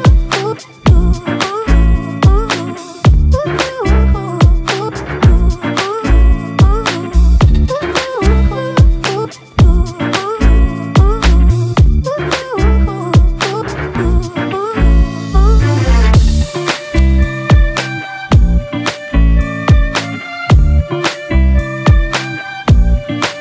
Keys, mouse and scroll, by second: 8.4 shift+click, 9.8 ctrl+e.